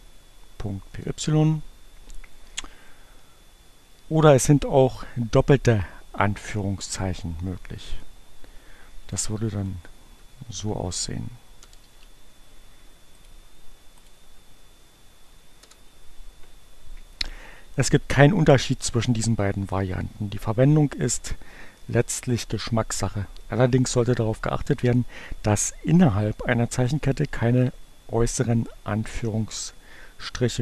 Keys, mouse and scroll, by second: 0.9 Return, 7.6 click, 8.7 Delete, 9.4 shift+2, 9.6 shift+Right, 11.3 BackSpace, 11.9 shift+2, 13.0 click, 13.8 click, 14.3 Up, 15.2 Return.